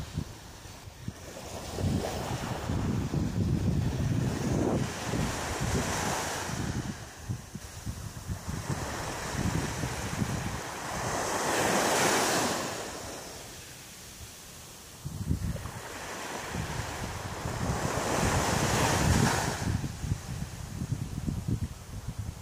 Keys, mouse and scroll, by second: 0.1 ctrl+z, 0.8 ctrl+z, 1.5 middle click, 3.1 right click, 4.0 shift+right click, 4.5 shift+right click, 5.1 shift+right click, 5.7 shift+right click, 6.1 shift+right click, 7.2 KP_3, 8.5 g, 10.0 click, 10.9 shift+right click, 11.5 shift+right click, 12.1 shift+right click, 12.5 shift+right click, 13.3 shift+right click, 13.4 shift+right click, 14.0 shift+middle click, 14.8 middle click, 16.3 middle click, 20.0 shift+right click, 20.4 shift+right click, 20.9 shift+right click, 21.4 shift+right click, 22.0 shift+right click, 22.1 shift+right click.